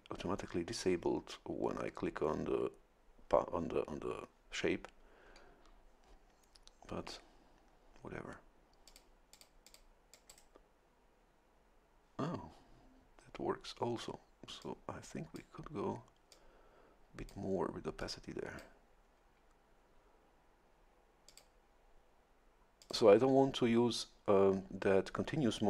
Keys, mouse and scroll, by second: 8.9 click, 9.3 click, 10.1 click, 10.3 middle click, 14.6 click, 16.3-17.5 drag, 18.0 click, 21.3 click, 22.8 click.